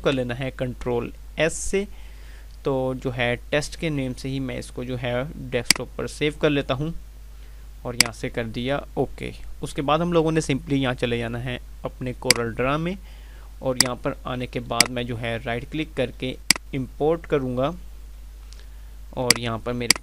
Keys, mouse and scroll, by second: 5.6 click, 12.1 click, 14.4 click, 14.6 right click, 16.4 click, 19.3 click.